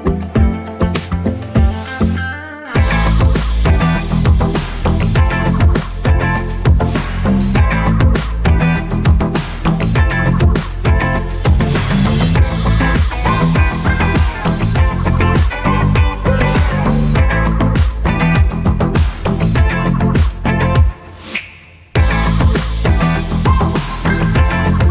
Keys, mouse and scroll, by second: 4.9 click, 7.5 click, 7.9 scroll up 1, 8.9 click, 20.5 ctrl+click, 21.0-21.4 scroll down 2, 22.0-22.5 scroll down 2, 23.6 scroll up 2, 24.2 scroll down 1.